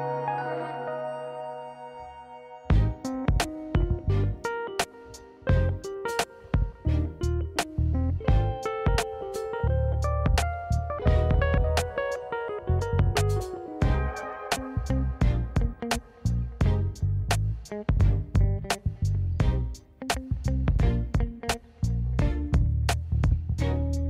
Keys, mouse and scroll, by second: 0.2 middle click, 1.2 Tab, 1.5 middle click, 2.1 KP_1, 2.2 shift+a, 4.3 s, 5.1 s, 6.2 g, 7.1 scroll up 1, 7.4 shift+middle drag, 7.7 scroll up 1, 8.0-8.4 scroll down 1, 8.4-8.8 scroll down 2, 8.8 Tab, 9.3 alt+z, 9.5 click, 10.1 g, 13.9-14.3 scroll up 2, 14.2 middle click, 14.7 s, 15.6 KP_1, 15.9 scroll down 1, 16.0 scroll down 1, 16.2 scroll up 1, 17.0 scroll up 1, 17.0 s, 17.7 s, 18.0 middle click, 18.2 Tab, 18.3 middle click, 18.5 Tab, 18.8 click, 19.2 shift+click, 19.5 middle click, 19.7 scroll up 1, 19.8 Tab, 20.4 ctrl+s, 21.8 ctrl+a, 21.8 middle click, 22.0 Tab, 22.8 ctrl+b.